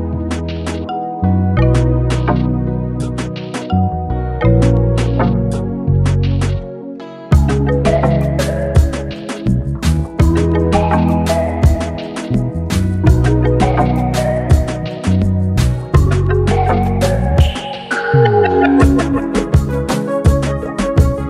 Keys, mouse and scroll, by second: 3.1 click, 5.6-8.4 typing, 9.2-12.0 drag, 14.6 click, 16.1 space, 16.4 click, 16.5 space, 18.8 click, 19.9-21.2 alt+drag.